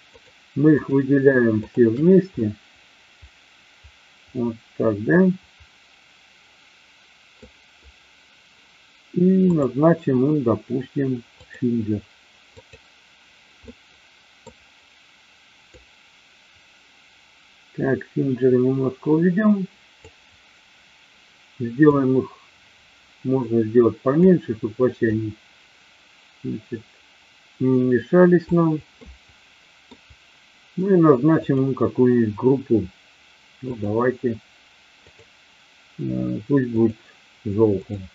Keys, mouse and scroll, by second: 2.8-7.4 middle drag, 9.5-11.7 drag, 12.5 click, 13.7-14.4 middle drag, 15.7-19.9 drag, 21.8-24.2 drag, 24.9-28.7 drag, 29.2-30.0 middle drag, 31.4 click, 33.7 click, 35.0-36.9 drag, 37.8 click.